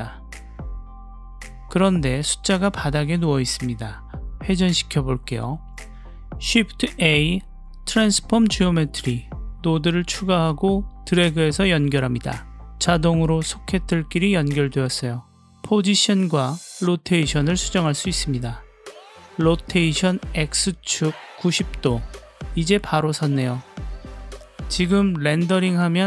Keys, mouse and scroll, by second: 0.4 click, 0.9 click, 1.6-2.2 middle drag, 2.7 shift+middle drag, 3.2-3.8 middle drag, 5.4-7.3 drag, 7.7 click, 8.4 shift+a, 16.1 click, 17.0 click, 17.9 click, 19.4-20.9 drag, 21.2 click, 23.0-24.8 middle drag.